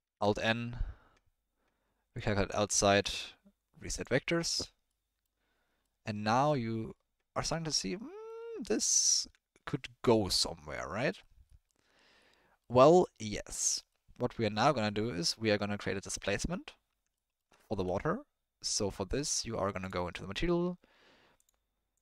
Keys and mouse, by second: 0.0 alt+n, 2.8 alt+n, 4.5 Tab, 4.9-5.2 middle drag, 5.8-6.4 middle drag, 6.9-8.2 middle drag, 8.6-9.0 middle drag, 9.2 Tab, 16.8 Tab, 17.1 middle click, 17.6 ctrl+middle click, 21.4 click.